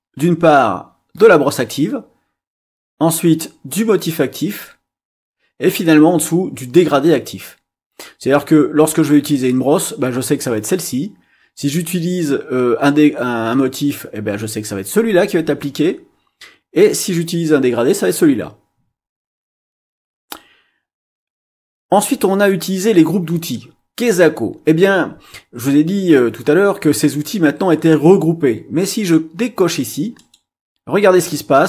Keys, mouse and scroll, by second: 30.1 click.